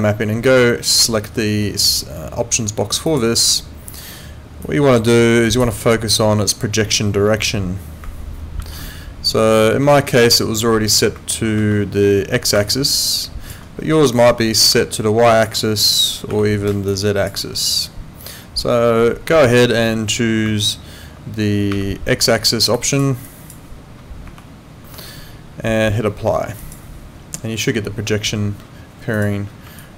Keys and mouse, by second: 3.1 click, 4.6 click, 8.6 4, 25.1 Escape, 26.6 click, 29.1 click, 29.8 alt+click.